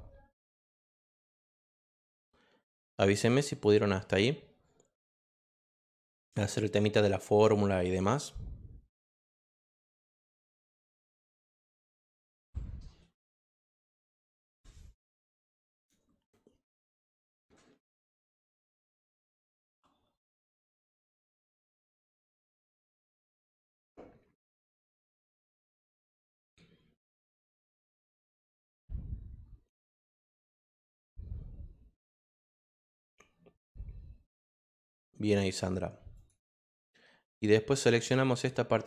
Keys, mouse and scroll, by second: 1.4-3.6 drag, 6.6-7.7 drag, 36.1 click, 36.6 click.